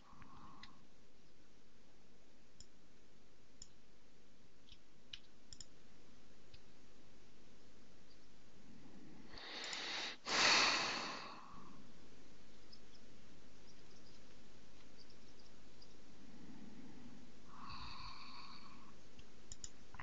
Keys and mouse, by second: 0.7 Tab, 2.8 click, 5.2 x, 6.6 Tab, 9.8 click, 10.4 click, 19.6 click.